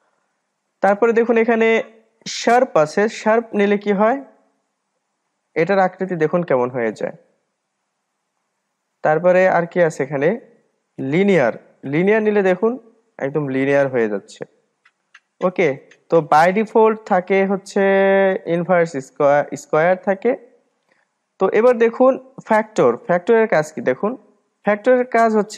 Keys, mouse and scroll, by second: 1.1-4.2 drag, 6.2-6.6 scroll down 1, 6.6 middle click, 7.6-8.3 scroll up 2, 8.3-9.6 scroll up 1, 9.6-12.8 drag, 15.5 click, 16.7-19.8 drag, 23.4-25.5 drag.